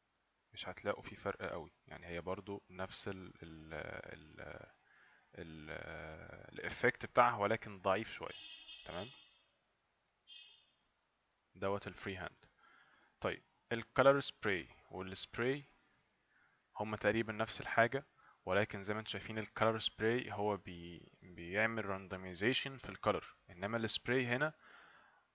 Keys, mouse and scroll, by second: 0.5 right click, 5.0 right click, 8.6 right click, 13.9 click.